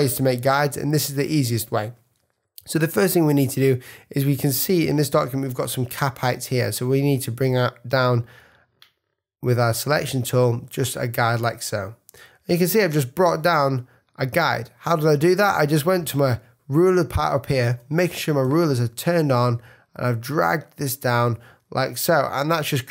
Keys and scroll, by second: 4.5 z, 5.6 v.